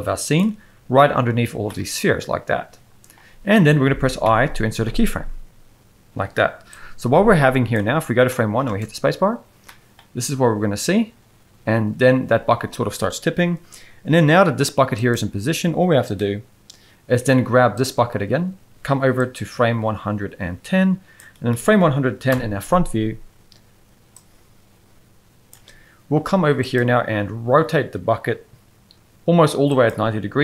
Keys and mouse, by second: 1.6-3.1 middle drag, 4.2 i, 6.7-7.7 drag, 8.3 middle drag, 8.7 space, 9.6 middle click, 12.7 space, 19.2-21.2 drag, 21.5 middle click, 22.3 KP_1, 27.2 r.